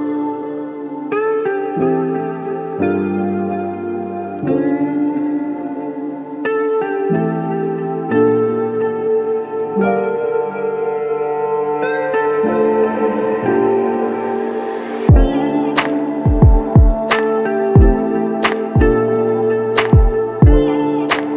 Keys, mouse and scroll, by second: 6.6-7.4 typing, 15.1 ctrl+click.